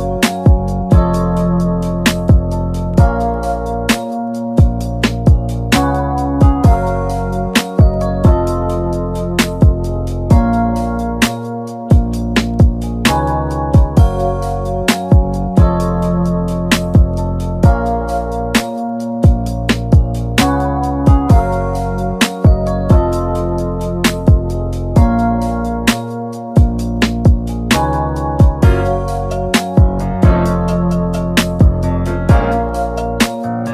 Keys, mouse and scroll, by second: 0.7-1.7 drag, 4.0-4.3 scroll down 4, 4.6 click, 5.1 r, 8.8-9.9 drag, 11.6 BackSpace, 12.3-13.1 scroll down 3, 13.1 KP_1, 14.6 n, 15.3-18.5 shift+middle drag, 18.5 g, 20.3-21.3 middle drag, 21.3-21.6 scroll down 1, 21.6 KP_1, 22.5-23.0 shift+middle drag, 23.0 click, 23.9-24.3 drag, 24.3-25.4 shift+middle drag, 25.4 click, 27.0 alt+g, 28.0 g, 30.1 shift+middle click, 31.0-32.4 drag, 32.4-33.5 shift+middle drag, 33.5-33.7 scroll down 3.